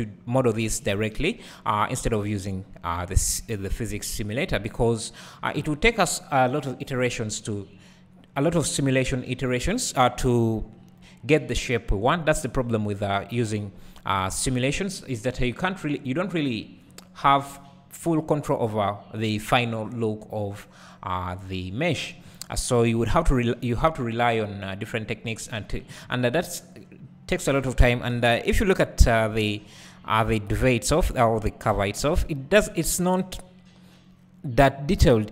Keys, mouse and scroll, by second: 28.2 KP_1, 29.1-32.4 scroll down 2, 32.4-33.5 scroll down 1, 33.5-35.3 scroll down 1.